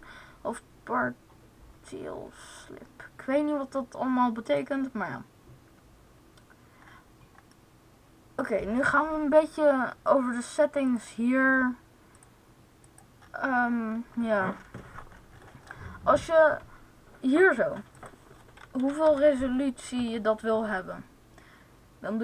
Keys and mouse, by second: 4.3-6.0 right drag, 19.1 0.